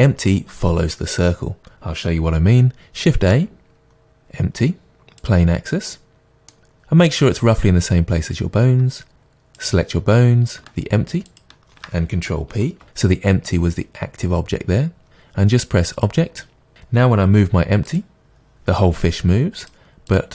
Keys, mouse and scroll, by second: 3.1 shift+a, 6.1-9.6 middle drag, 9.6 click, 11.4 shift+click, 12.8 ctrl+p, 17.3 click, 17.7 g, 20.1 click.